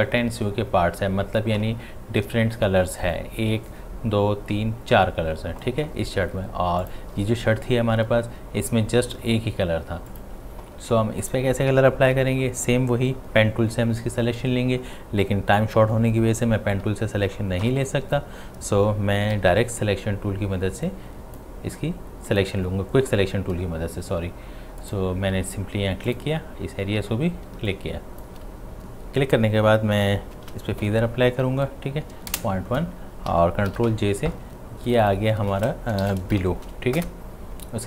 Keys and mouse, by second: 6.8 click, 6.9 click, 10.1 click, 17.6 typing, 19.4 [, 19.5 [, 19.8 [, 20.9-22.3 drag, 24.8 click, 27.5 space, 27.7 click, 28.0 space, 30.4 shift+F6, 33.7 ctrl+j, 34.9 click, 35.8-36.9 typing, 37.0 Return.